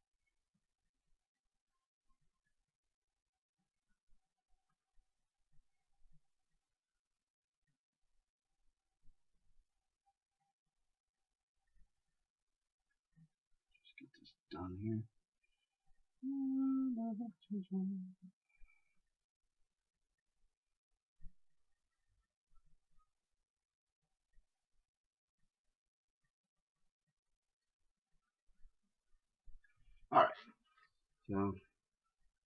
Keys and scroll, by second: 4.8 ctrl+z, 17.4 ctrl+z, 31.7 shift+space.